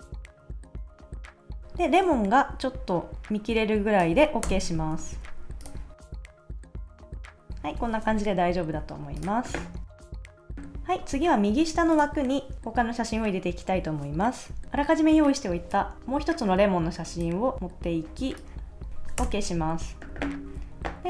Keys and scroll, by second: 4.4 Return, 4.9 super+s, 6.2 Down, 6.6 super+s, 6.7 Left, 7.0 shift+Right, 7.4 Left, 7.8 super+s, 10.0 Right, 10.2 super+s, 19.2 Return.